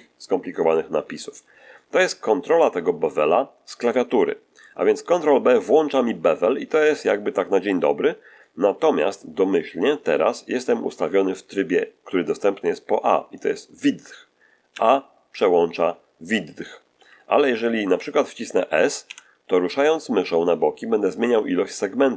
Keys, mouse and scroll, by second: 14.6 a, 16.9 a, 19.0 s.